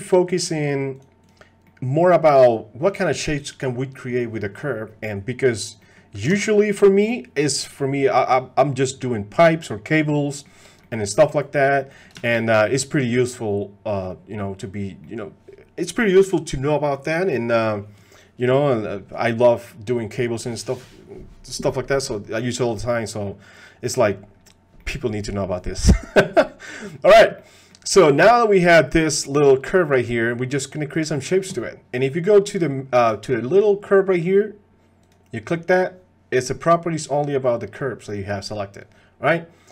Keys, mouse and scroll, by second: 1.7 middle click, 5.8 middle click, 8.0 ctrl+Tab, 10.3 click, 10.8 click, 11.9 click, 12.2 shift+drag, 12.4-14.0 drag, 14.4 drag, 15.0 click, 19.3 click, 22.7-23.3 drag, 24.8 click, 26.7 click, 27.4 click, 28.5 click, 30.1 click.